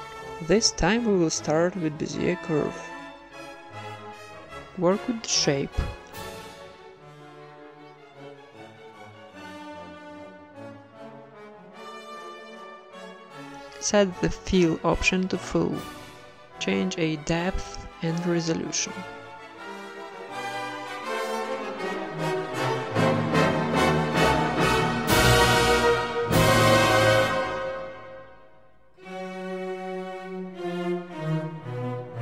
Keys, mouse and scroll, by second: 0.4 Tab, 0.8 r, 1.8 r, 3.0-4.1 right drag, 3.2 r, 3.6 g, 4.4-6.2 right drag, 4.5 r, 4.9 g, 6.5-10.6 typing, 10.9 Tab, 12.0-18.6 drag, 18.6 Tab, 18.9-22.6 right drag, 19.1 alt+s, 21.7 g, 22.8 Tab, 23.1 z, 24.3-25.5 middle drag, 25.0 z, 25.5 KP_1, 26.4 click, 26.9 z, 27.3 middle click, 28.0 Tab, 28.8 KP_1, 29.5-32.0 drag, 32.0 middle click.